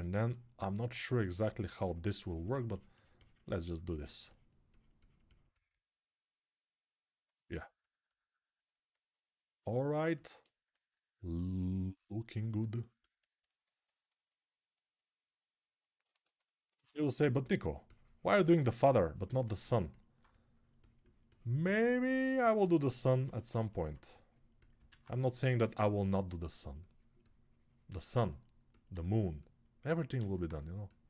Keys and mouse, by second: 15.8-27.6 ctrl+alt+drag, 16.5 alt+q, 24.7 alt+q, 30.2 alt+q.